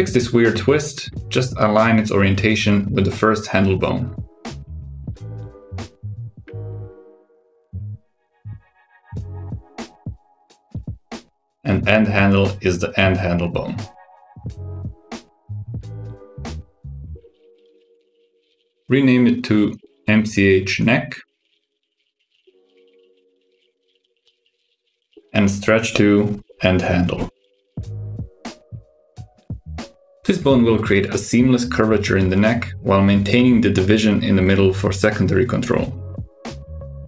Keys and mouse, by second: 1.5 middle click, 2.9 Tab, 4.9 shift+click, 6.3 shift+n, 10.4-11.1 drag, 12.7-15.9 drag, 17.7 click, 18.4 click, 19.7 F2, 24.2 super+KP_6, 25.6 click, 26.6 shift+click, 27.6 ctrl+shift+c, 30.0 super+KP_6, 30.5 click, 30.9 g, 32.9 r, 34.7 r, 35.9 super+KP_6.